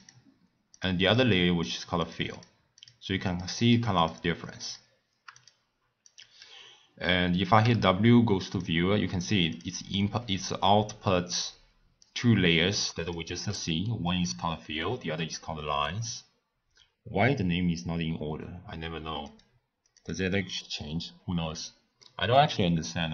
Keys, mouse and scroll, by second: 0.0 click, 0.7 click, 1.6 click, 2.0 click, 2.3 click, 2.8 click, 3.3 click, 3.6 click, 4.0 click, 4.6 click, 5.3 click, 6.0 click, 7.6 w, 10.0 scroll up 1, 10.0-10.8 middle drag, 10.8-11.7 scroll down 1, 12.0-13.5 drag, 13.5-16.5 middle drag, 19.2-22.0 drag, 22.0-23.1 middle drag.